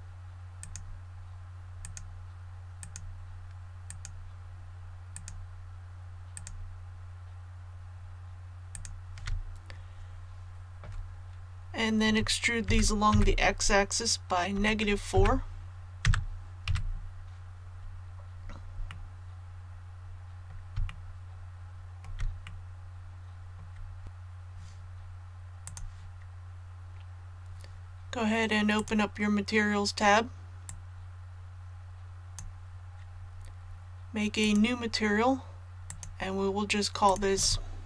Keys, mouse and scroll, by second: 0.6 shift+right click, 1.8 shift+right click, 2.8 shift+right click, 3.8 shift+right click, 5.1 shift+right click, 6.3 shift+right click, 8.7 shift+right click, 12.6 e, 13.1 x, 15.1 KP_4, 16.6 a, 17.7 scroll down 1, 18.8-20.6 middle drag, 20.8 shift+middle click, 22.4-23.6 middle drag, 24.0 scroll down 1, 25.6-33.3 drag.